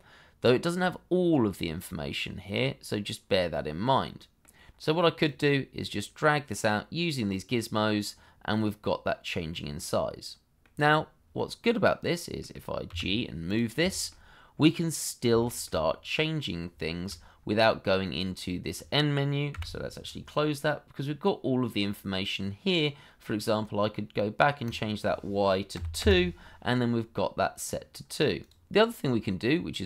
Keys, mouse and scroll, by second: 9.7 middle click, 12.9 g, 13.9 shift+middle click, 14.6 middle click, 15.4 shift+middle click, 15.8 middle click, 16.8 shift+middle click, 19.5 n, 25.7 2, 26.0 Return, 27.1 middle click, 28.7 middle click.